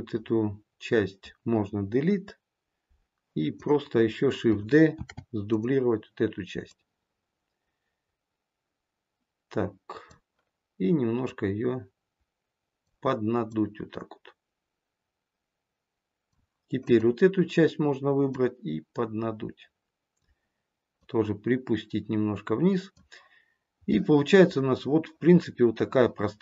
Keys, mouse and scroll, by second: 2.0 Delete, 3.4 click, 4.9 shift+d, 6.5 click, 11.1 click, 13.4 click, 16.7 click, 18.2 click, 23.8 middle click.